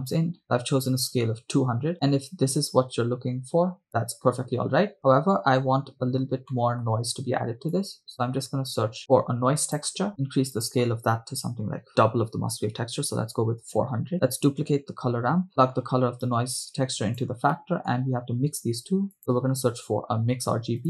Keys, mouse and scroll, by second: 0.9 0, 3.9-5.0 drag, 6.5 middle click, 7.1-7.7 scroll down 2, 7.7 click, 9.0 scroll down 1, 9.1 shift+a, 10.5 scroll up 3, 10.6-13.5 drag, 12.8 0, 14.1 click, 14.7 shift+d, 15.5 middle click, 16.6-17.4 drag, 17.7 middle click, 18.7 shift+a.